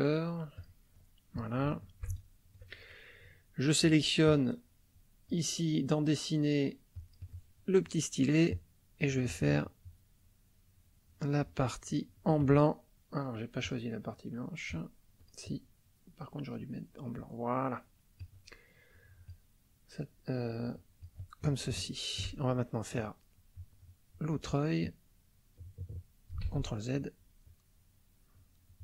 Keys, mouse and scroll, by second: 0.6 click, 1.7 shift+middle click, 2.2 ctrl+shift+middle click, 4.2-5.5 drag, 6.9 click, 8.5-12.4 drag, 13.6 click, 15.2 click, 16.6-18.4 drag, 18.9 click, 20.6 click, 21.7 shift+middle click, 24.8-26.5 drag, 26.4 ctrl+z, 27.4-28.8 drag.